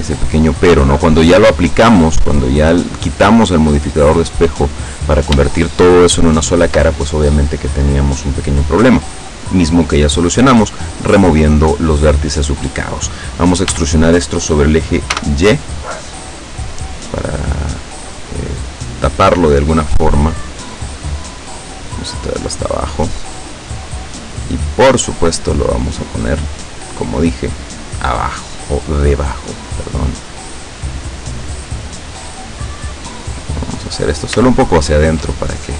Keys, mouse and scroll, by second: 0.3 shift+right click, 0.9 shift+right click, 1.3 shift+right click, 1.8 shift+middle click, 3.0 shift+right click, 3.5 shift+right click, 4.8 shift+right click, 5.6-7.0 shift+middle drag, 13.7 e, 15.2 y, 22.5 click, 25.7-28.5 drag, 28.6-31.0 middle drag, 31.9 right click, 32.7-34.2 drag, 34.5 shift+middle click, 35.6 shift+right click.